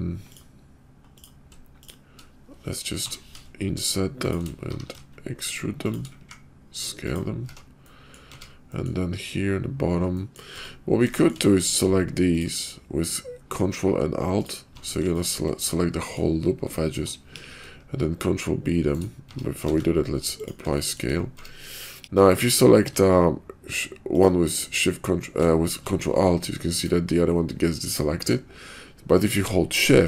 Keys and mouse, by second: 3.3 shift+i, 4.6 e, 6.1 s, 7.4 Tab, 7.8 middle click, 8.3 Tab, 8.6 middle click, 10.1 middle click, 10.5 Tab, 15.1 ctrl+click, 15.6 middle click, 16.7 ctrl+click, 16.9 ctrl+shift+middle click, 17.2 ctrl+b, 19.2 Tab, 19.6 ctrl+a, 20.8 shift+click, 21.3 Tab, 22.0 ctrl+b, 24.0 ctrl+alt+click, 27.7 ctrl+alt+click.